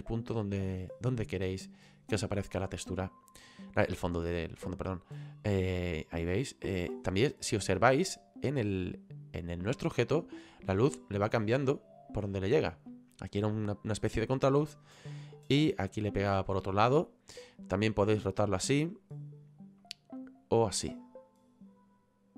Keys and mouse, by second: 5.6 click, 6.9 click, 18.0 click, 20.3 click.